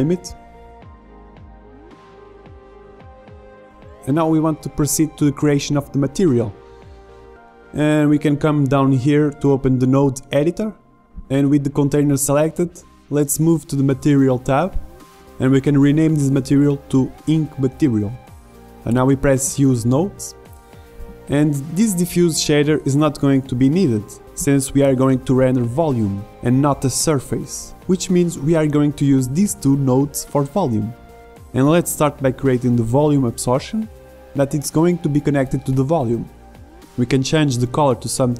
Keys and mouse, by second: 0.0 s, 0.4 click, 1.2 middle click, 1.4 KP_0, 2.1 middle click, 2.7 click, 4.3 middle click, 4.5 click, 5.5 middle click, 5.6 click, 9.1 middle click, 10.4-13.1 drag, 14.4-17.9 drag, 19.4-21.3 drag, 21.3 middle click, 22.3-23.8 drag, 23.8 Delete, 25.0 shift+a, 33.4-36.8 drag, 37.8 click.